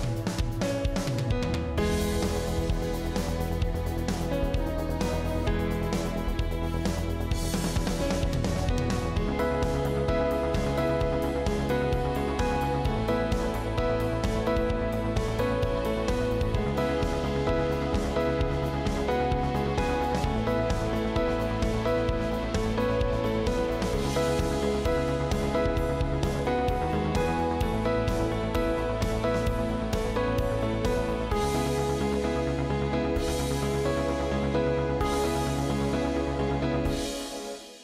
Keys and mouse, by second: 1.5 shift+middle click, 3.0 alt+click, 15.9 alt+click, 17.4 ctrl+click, 18.4 ctrl+click, 19.5 KP_Decimal, 20.2 alt+z, 20.5-21.6 drag, 21.9 g, 23.6 g, 25.2 g, 27.5 KP_3, 29.2 alt+z, 29.6 click, 31.2 click, 31.5 middle click, 31.6 click, 32.6 middle click, 33.2 KP_3, 34.9 shift+middle click, 37.3 click.